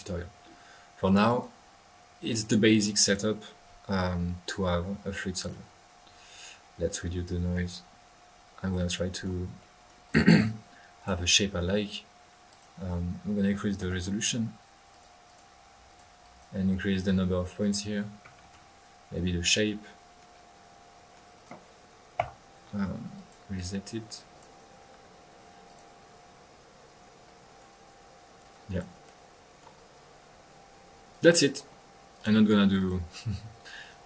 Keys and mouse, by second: 1.1 click, 1.6-2.1 middle drag, 2.3-3.3 drag, 4.9-5.4 middle drag, 5.4 click, 6.8 click, 7.5 middle click, 10.0 click, 10.9 click, 12.5-12.8 drag, 14.9-15.2 drag, 15.2 click, 15.8 drag, 16.2 click, 16.9 drag, 17.6 click, 18.0 click, 19.5-21.3 middle drag, 21.3-21.8 drag, 22.2 1, 23.1-23.9 drag, 24.3 click, 25.6 click, 26.0 drag, 27.2 middle click, 28.4 click, 29.0 click, 29.4 middle click, 29.7-31.4 drag, 32.1 click, 32.7 click, 33.8-34.0 drag.